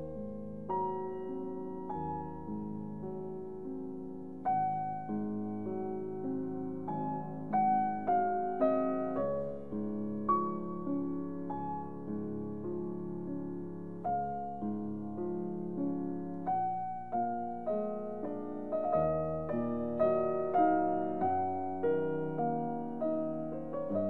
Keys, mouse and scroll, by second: 2.2 right click, 4.6-19.3 middle drag, 19.3-20.0 typing.